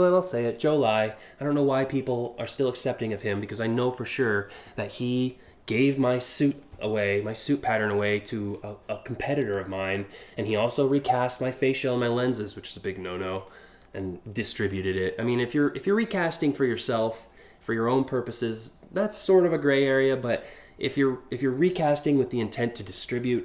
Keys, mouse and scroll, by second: 2.1 alt+scroll up 5, 9.0 click, 10.3 scroll down 1.